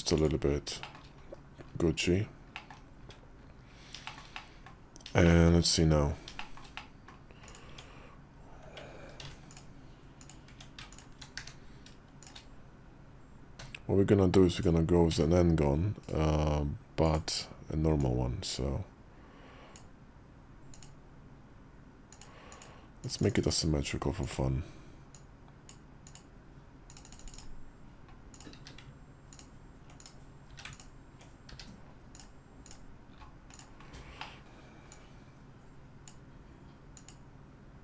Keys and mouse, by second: 0.1 click, 0.7 shift+middle click, 1.2 KP_5, 2.4 middle click, 2.9 `, 3.9 shift+middle click, 4.2 middle click, 5.1 middle click, 6.3 shift+middle click, 6.6 middle click, 7.3 click, 7.5 Tab, 9.0 ctrl+r, 10.3 Tab, 11.2 q, 13.5 KP_5, 13.5 `, 13.5 d, 14.9 d, 16.9 click, 17.9-19.7 drag, 24.1 click, 25.0 click, 28.2 click, 28.5 q, 29.9 click, 30.3 q, 31.4 q, 33.4 click, 34.1 middle click, 34.8-36.0 drag.